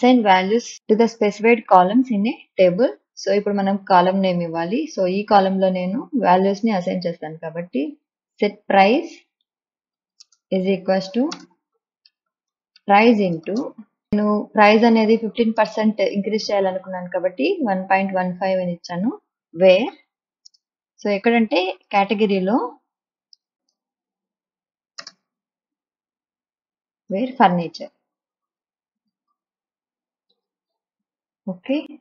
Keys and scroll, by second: 8.8-13.8 typing, 16.0 space, 19.7-25.4 typing, 26.5 Left, 27.9-32.0 typing, 31.7 Right.